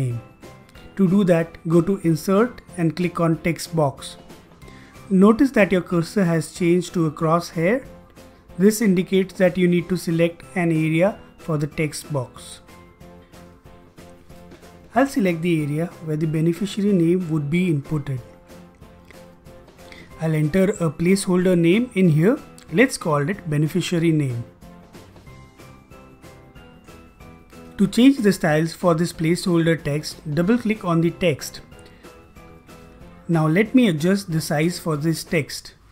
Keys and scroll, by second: 22.8-27.9 typing.